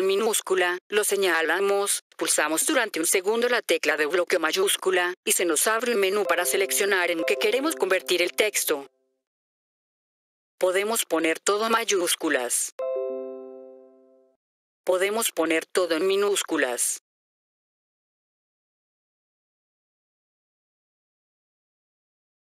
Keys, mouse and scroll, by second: 0.9-2.6 drag, 3.1-4.3 right drag, 6.0 click, 6.5-6.9 drag, 11.7 click, 14.8 click, 15.7-16.3 drag, 20.7 click.